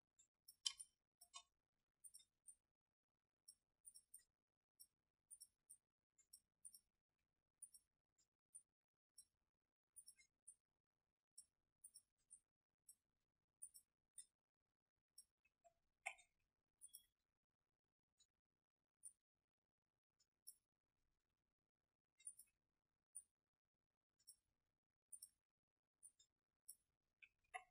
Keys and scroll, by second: 0.7 space, 1.6 alt+space, 16.0 ctrl+z, 27.5 ctrl+alt+z.